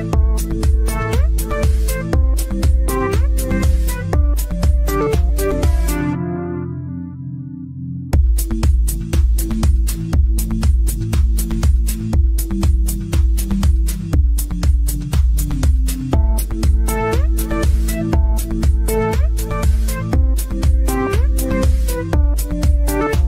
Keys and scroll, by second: 1.0 e.